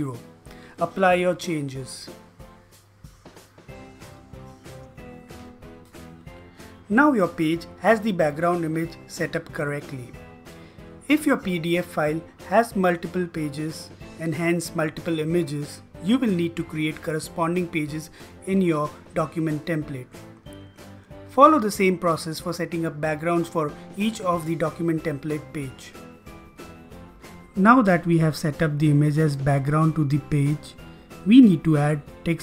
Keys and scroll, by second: 0.4-3.6 typing, 2.0 Delete, 4.7 space, 7.0 typing.